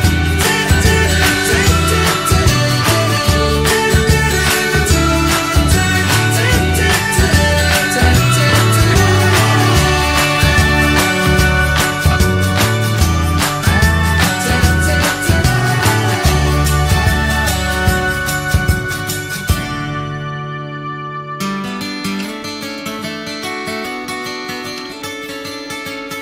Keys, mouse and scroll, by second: 2.0 click, 2.5 click, 3.7 ctrl+shift+b, 6.7 g, 7.9 click, 8.6 click, 9.4 click, 9.9 click, 11.1 click, 11.6 click, 12.7 click, 13.2 click, 13.8 click, 14.2 click, 14.6 click, 15.6 scroll down 2, 15.8 middle click, 16.1 scroll up 1, 16.4 shift+middle click, 17.1 click, 18.0 click, 18.4 middle click, 19.4 click, 20.0 click, 20.3-22.7 middle drag, 22.7 r, 23.7-26.2 middle drag.